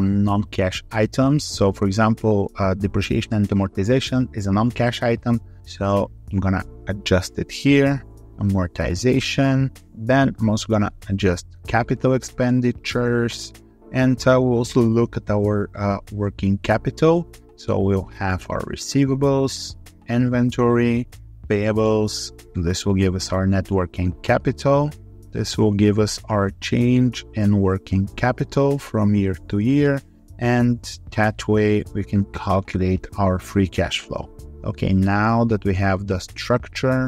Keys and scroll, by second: 36.8 alt+4.